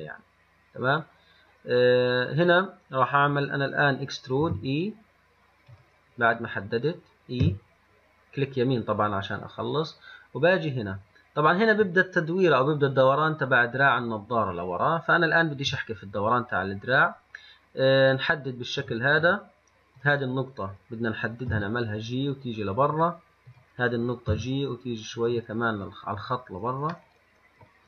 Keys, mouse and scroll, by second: 7.7 e, 20.2 click, 21.7 g, 23.7 click, 24.5 g, 25.9-26.2 scroll up 3, 27.2-27.8 middle drag.